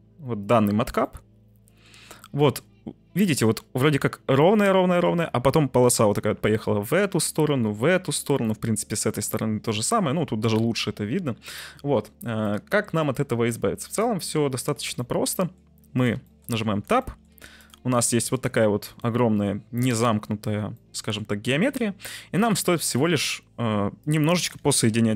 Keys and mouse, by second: 1.0-1.8 middle drag, 2.3 middle click, 8.4-10.2 middle drag, 10.8-11.3 middle drag, 12.5-14.3 middle drag, 15.0-15.7 middle drag, 16.3 shift+middle click, 16.6 Tab, 17.0 middle click, 17.2 3, 18.0 middle click, 19.1-20.2 middle drag, 20.8 middle click, 21.4 1.